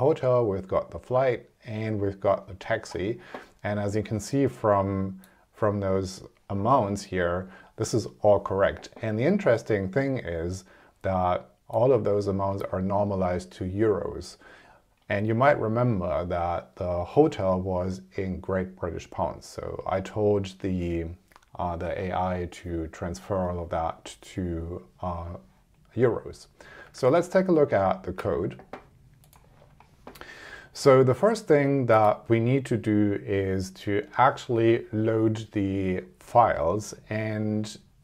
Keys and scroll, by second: 26.9 super+Tab.